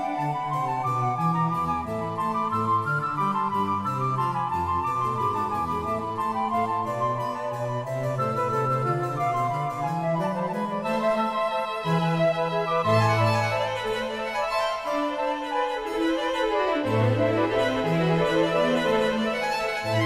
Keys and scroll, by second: 8.1 s, 8.6 space.